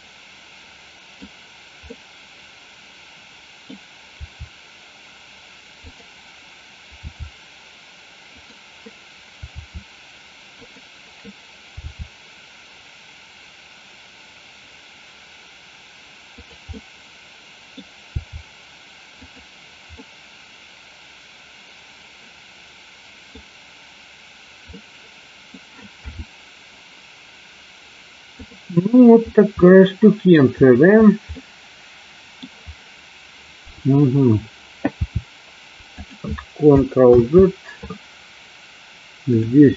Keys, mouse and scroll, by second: 2.0-3.7 middle drag, 4.2 r, 7.1 g, 8.5 click, 9.7 r, 10.7 click, 12.0 g, 16.5 click, 16.7-17.9 middle drag, 18.1 g, 19.4 click, 20.1-23.3 middle drag, 24.9-25.6 middle drag, 26.1 KP_7, 28.5 click, 29.7-30.4 middle drag, 31.4-32.5 middle drag, 35.1 r, 36.1 click, 37.2 ctrl+z.